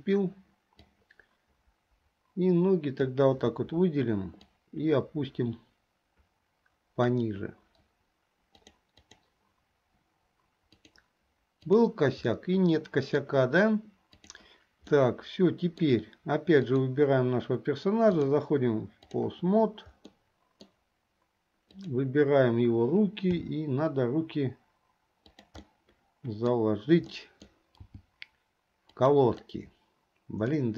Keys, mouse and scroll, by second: 0.9-3.2 drag, 4.7-7.3 drag, 8.6 click, 11.0 click, 12.0 click, 12.4 middle click, 14.5 click, 15.1 middle click, 18.2-19.4 drag, 20.2 middle click, 21.8 click, 23.6 g, 25.8-26.7 middle drag, 27.2 middle click, 28.0 g, 30.6-30.7 middle drag.